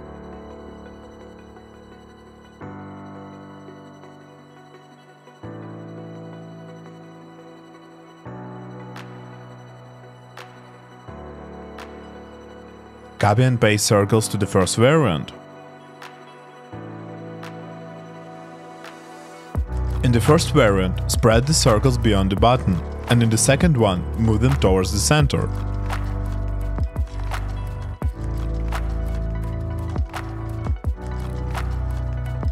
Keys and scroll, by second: 16.5 super+c, 18.1 super+v, 20.8 shift+Left, 21.2 shift+Up, 21.2 shift+Left, 21.4 shift+Up, 23.9 shift+Down, 24.3 shift+Left, 24.5 shift+Down, 24.5 shift+Left, 26.2 shift+Up, 29.2 shift+Down, 31.3 shift+Down, 32.0 shift+Right.